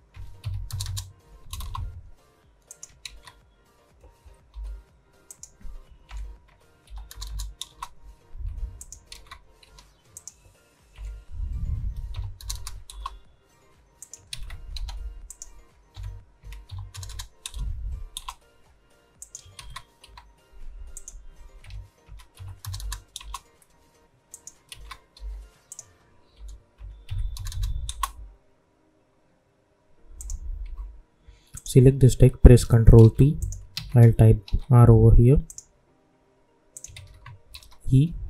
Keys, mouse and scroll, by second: 1.5 Return, 2.6 click, 3.0 ctrl+d, 4.5 p, 5.2 click, 6.0 Right, 7.6 Return, 8.7 click, 9.0 ctrl+d, 10.1 click, 10.9 Right, 12.8 Return, 13.9 click, 14.2 ctrl+d, 14.7 p, 15.2 click, 15.9 Right, 18.1 Return, 19.1 click, 19.5 ctrl+d, 20.0 p, 20.9 click, 21.6 Right, 23.1 Return, 24.3 click, 24.6 ctrl+d, 25.1 p, 25.6 click, 26.3 Right, 27.8 Return, 30.1 click, 30.6 u, 31.5 click, 32.9 ctrl+t, 33.3 click, 33.7 ctrl+a, 34.4 shift+r, 35.4 click, 36.9 ctrl+a, 37.5 shift+e.